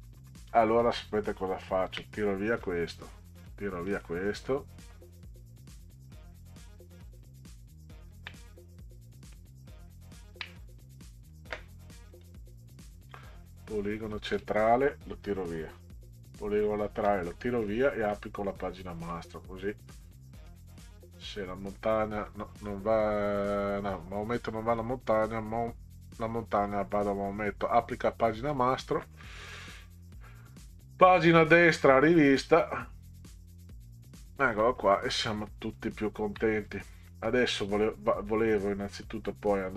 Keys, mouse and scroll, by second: 1.9 Delete, 2.6 middle click, 3.9 click, 4.5 click, 6.1 click, 7.6-8.1 ctrl+scroll down 4, 10.0 ctrl+scroll up 2, 12.1 click, 15.4 Delete, 16.2 click, 17.0 Delete, 20.5 click, 23.4 click, 28.5 click, 30.0 click, 32.5 click, 33.3 click, 34.6 middle click, 35.9 ctrl+scroll up 2, 37.1 middle drag, 38.3 click.